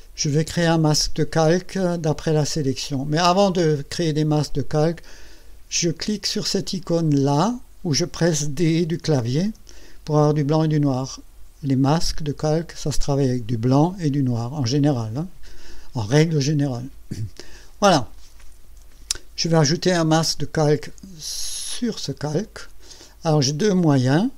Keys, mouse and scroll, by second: 9.5 d, 22.1 click.